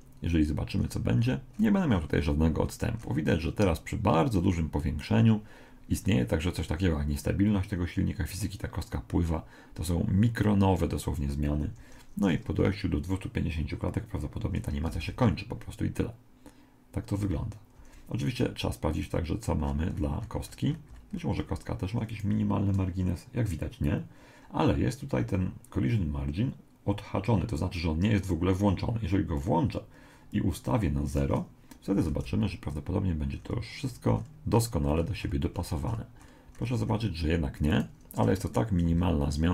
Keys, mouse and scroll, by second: 0.8 middle click, 4.2-5.4 middle drag, 11.6 Escape, 14.2-15.2 middle drag, 15.0 alt+a, 15.6 middle click, 17.8 Escape, 19.0 right click, 19.6-21.6 middle drag, 22.1 right click, 29.4-32.1 drag, 32.1 alt+a, 33.4-38.9 middle drag, 37.7-39.5 right drag.